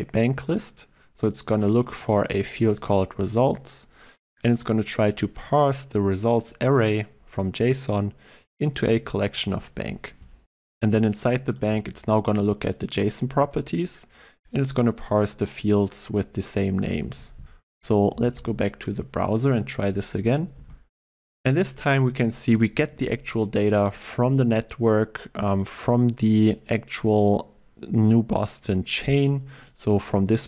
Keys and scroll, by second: 11.6 ctrl+b.